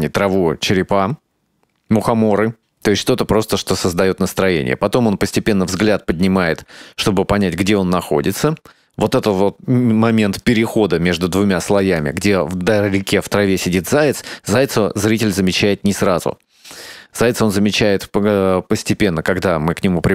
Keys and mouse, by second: 17.9-20.1 drag.